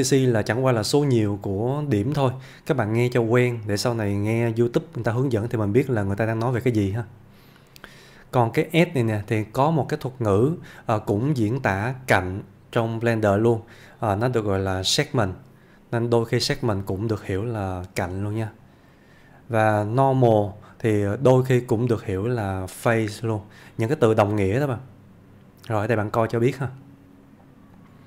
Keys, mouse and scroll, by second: 8.7-9.9 click, 13.2 click, 20.0-20.9 click, 25.7 click.